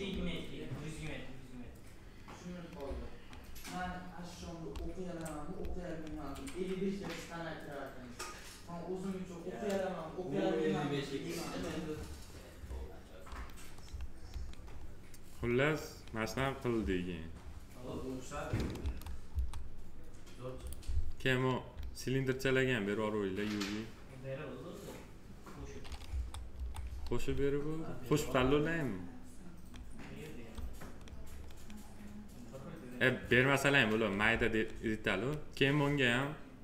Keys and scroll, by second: 18.8 F4, 26.0 F4.